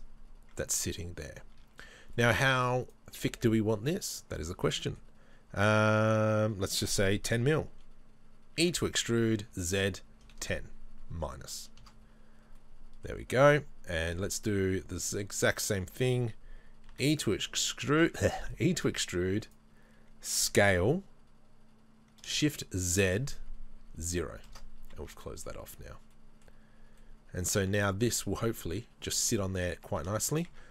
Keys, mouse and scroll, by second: 1.2-1.5 scroll up 2, 1.5 Tab, 2.8 alt+right click, 3.7 middle click, 8.6 e, 12.6 middle click, 16.9 e, 20.5 s, 24.9 Tab, 25.5-30.7 middle drag, 25.8-26.1 scroll down 2, 26.6-27.0 scroll down 2, 30.5 Tab.